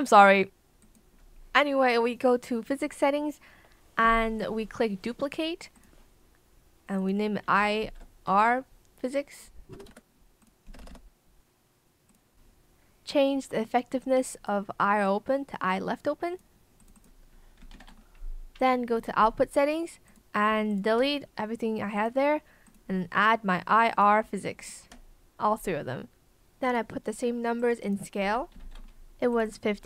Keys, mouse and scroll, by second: 7.8 BackSpace, 9.8 r, 9.8 space, 10.7 BackSpace, 17.6 5, 17.8 KP_0, 17.8 Return, 20.6 shift+click, 24.5 shift+click, 28.5 KP_5, 28.5 KP_0, 28.7 Return, 29.7 KP_6, 29.8 KP_0.